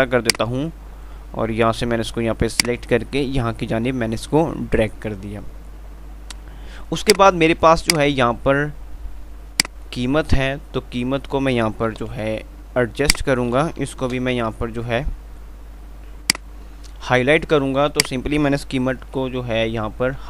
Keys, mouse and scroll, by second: 0.6-4.7 drag, 7.1-12.2 drag, 12.2 shift+Page_Up, 13.0 F2, 13.3 click, 13.5 F2, 14.3 Page_Up, 18.3-20.2 drag, 18.3 typing.